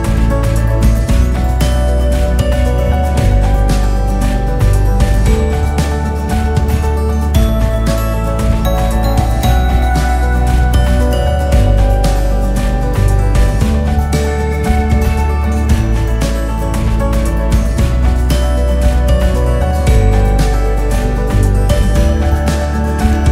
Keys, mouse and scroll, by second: 0.6-1.5 scroll down 1, 1.5 KP_0, 2.4 KP_1, 3.3 ctrl+KP_1, 4.0 KP_2, 4.7 KP_8, 4.9 KP_8, 5.1 KP_8, 5.6-6.4 scroll up 6, 6.4 scroll down 3, 7.0 shift+a, 11.8 g, 15.7 s, 20.5 g.